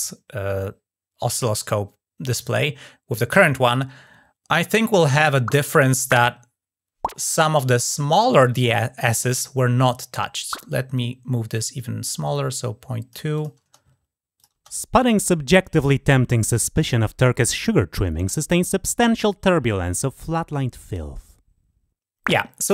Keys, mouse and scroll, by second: 10.7-12.9 drag, 13.2 click, 14.2 click.